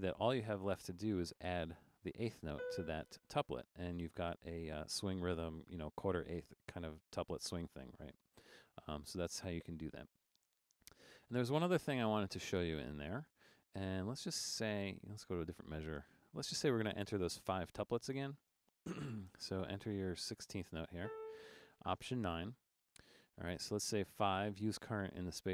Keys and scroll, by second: 1.2 4, 2.3-3.0 typing, 11.5 Down, 14.7 Right, 16.5 3, 21.0-21.8 typing, 22.4 alt+9, 24.1 5.